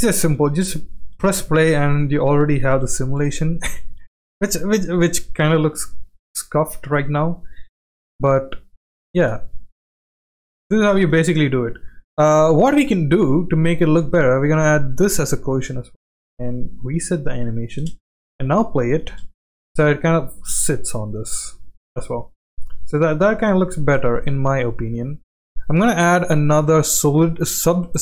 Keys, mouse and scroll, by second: 0.5 space, 1.9 space, 2.1-2.8 middle drag, 3.3 space, 3.5 space, 4.6 space, 5.0 space, 5.9-6.7 drag, 7.3-7.8 middle drag, 8.0 space, 9.1 space, 10.2-10.7 middle drag, 10.2 space, 11.5 space, 11.6-12.1 middle drag, 12.8 ctrl+z, 14.0 middle click, 15.2 click, 16.3 click, 17.8 space, 19.1 space, 20.2-21.9 drag, 22.3-23.1 middle drag, 23.4 click, 25.4 click, 26.1-27.6 drag.